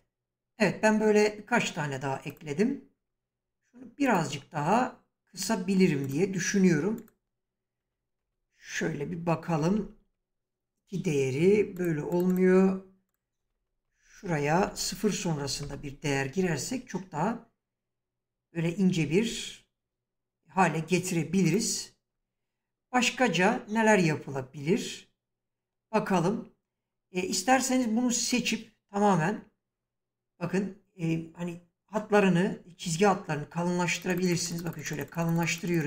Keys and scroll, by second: 7.2 BackSpace, 9.7 2, 10.0 Return, 13.3 BackSpace, 14.6 0, 15.3 5, 15.6 Return.